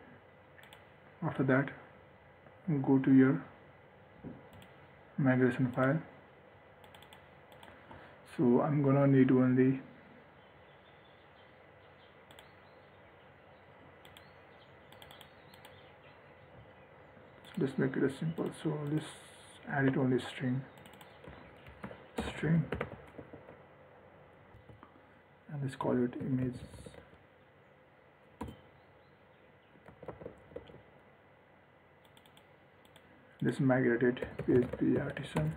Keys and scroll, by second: 20.0 ctrl+d, 30.0 ctrl+s.